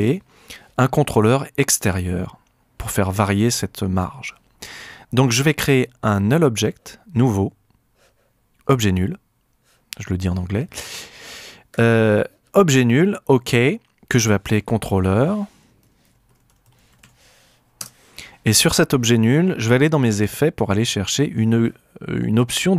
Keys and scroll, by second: 14.6 Return, 15.7-17.5 typing, 17.8 KP_Enter.